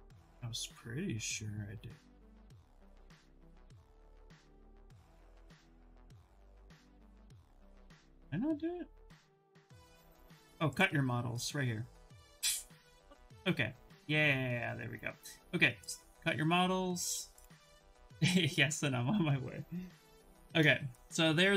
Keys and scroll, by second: 19.7 ctrl+v, 20.2 Return.